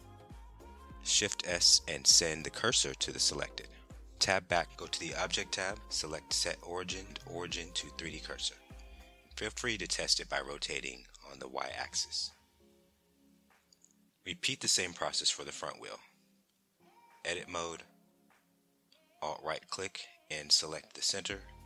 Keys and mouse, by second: 0.8 shift+s, 3.7 Tab, 5.3-8.5 drag, 9.5-12.3 middle drag, 9.7 click, 13.1 click, 13.7 Tab, 14.1 middle click, 16.1 click, 17.3 alt+click, 18.6 shift+s.